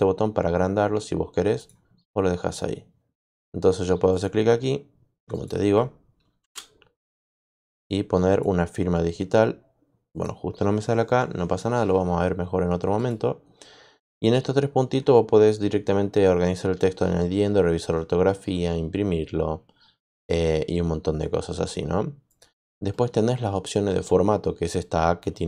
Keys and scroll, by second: 6.3 shift+Return.